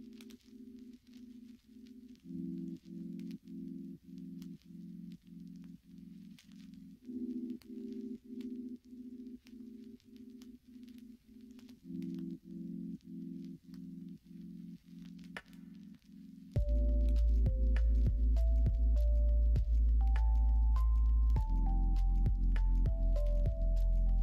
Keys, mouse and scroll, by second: 0.7 click, 2.4 m, 7.7 shift+click, 8.4 m, 9.5 click, 11.1 m, 12.1 click, 13.3 m, 16.0-19.5 middle drag, 20.8 shift+middle click, 21.9 shift+middle click, 22.8 shift+middle click, 23.6 shift+middle click.